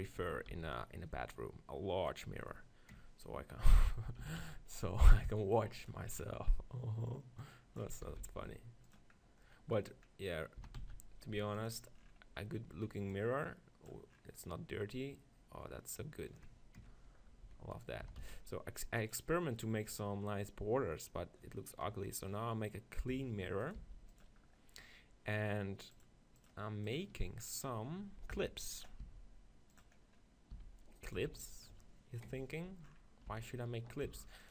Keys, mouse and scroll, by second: 0.1-1.6 right drag, 0.2 s, 1.6 click, 1.9 middle click, 2.2-4.0 drag, 4.0-5.8 middle drag, 4.2 s, 5.9-10.8 drag, 8.0 s, 9.5-11.7 middle drag, 10.6 s, 11.7-14.9 drag, 14.5 middle click, 17.5 s, 17.9-19.3 right drag, 18.1 s, 19.2 click, 21.9 KP_3, 23.1 middle click, 23.1 s, 23.7-27.8 drag, 23.8 g, 27.8 middle click, 28.4 g, 29.0 s, 29.8-31.4 drag, 30.5 s, 31.2 g, 33.5-34.5 typing.